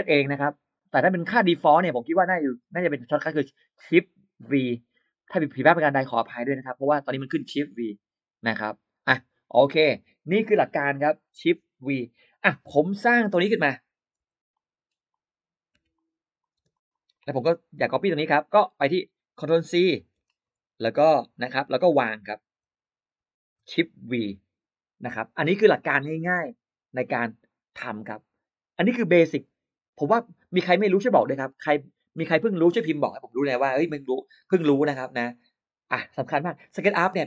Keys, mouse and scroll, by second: 12.9 click, 14.1 r, 14.4 click, 14.9 click, 15.6 p, 15.8 click, 16.2 click, 16.4 space, 16.6 click, 16.7 click, 16.9 click, 17.0 click, 17.9 click, 17.9 g, 18.3 click, 20.0 ctrl+c, 20.2 ctrl+click, 21.7 click, 23.4 shift+v.